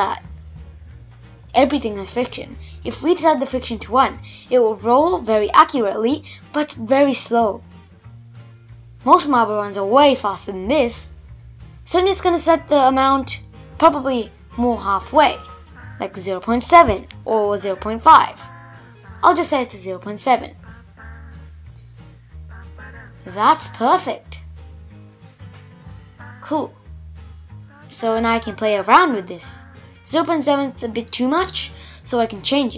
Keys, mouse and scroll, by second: 0.0-1.6 drag, 1.6 shift+Left, 2.1 space, 4.6-5.0 scroll up 2, 5.0-7.7 middle drag, 7.7 shift+Left, 8.5 space, 9.9-15.7 drag, 17.4 space, 19.0-20.0 middle drag, 20.0 shift+Left, 21.9 space, 22.5 space, 23.7 Left, 24.2 space, 24.6 Left, 26.5-29.0 drag, 29.4 space, 31.0 shift+Left.